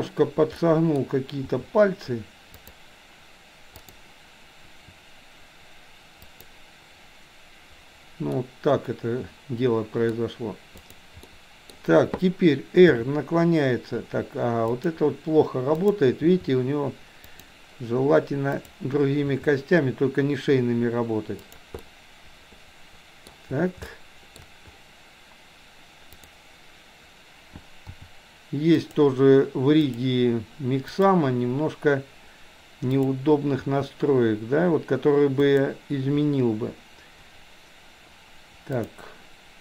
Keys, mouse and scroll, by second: 0.7 middle click, 1.6 r, 4.6 r, 8.3-10.2 middle drag, 10.8 click, 11.3-11.8 middle drag, 12.9 r, 15.9 click, 16.3 r, 18.6 click, 21.8-23.3 middle drag, 23.3-23.9 scroll down 1, 23.9-24.4 shift+middle drag, 24.4-24.8 scroll down 1, 26.2 click, 27.9 r, 29.9 click, 30.9 click, 32.9 click, 33.7 r, 38.8 click.